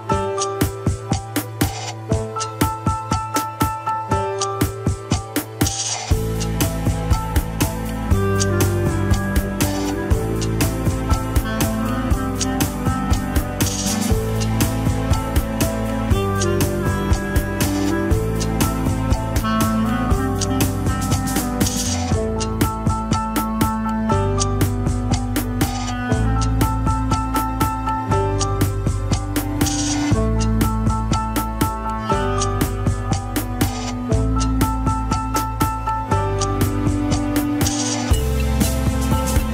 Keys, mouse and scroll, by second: 0.0-2.7 drag, 2.7-3.7 scroll up 8, 3.7 click, 4.1 scroll up 4, 4.5 ctrl+Tab, 4.7 shift+middle click, 4.9-5.2 scroll up 4, 5.2 alt+z, 5.8 n, 15.1 n, 15.1 scroll up 4, 15.4 shift+middle click, 15.9 shift+click, 16.5 scroll down 4, 16.8 shift+middle click, 17.4-18.0 scroll up 2, 18.0 shift+click, 18.7 shift+click, 19.6 h, 19.8 alt+z, 20.2 alt+z, 20.4 click, 21.0 alt+z, 21.1 scroll down 5, 21.3 shift+middle click, 21.7 scroll up 4, 22.1 alt+z, 22.3 shift+click, 23.3 scroll down 3, 23.5 middle click, 24.5 shift+middle click, 24.9 scroll up 1, 25.3 shift+middle click, 26.0 shift+h, 26.6 click, 27.0 scroll down 1, 27.5-27.9 scroll up 1, 27.9 click, 28.1 scroll down 3, 28.9 click, 31.6 alt+z, 32.6 click, 34.7 scroll down 1, 35.7 ctrl+c, 38.7 KP_7, 38.9-39.5 scroll up 5, 39.1 shift+middle click.